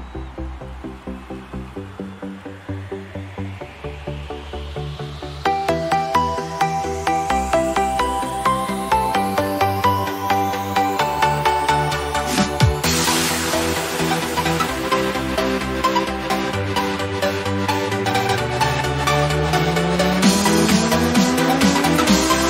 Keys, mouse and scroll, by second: 1.1 typing, 2.8-4.8 typing, 7.2 click, 9.9 f, 12.2 b, 14.0-14.7 typing, 14.2 click.